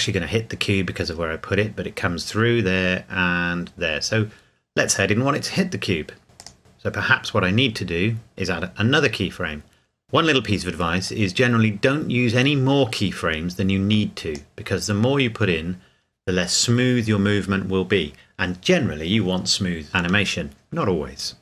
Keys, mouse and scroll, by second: 6.4 click, 10.0 click.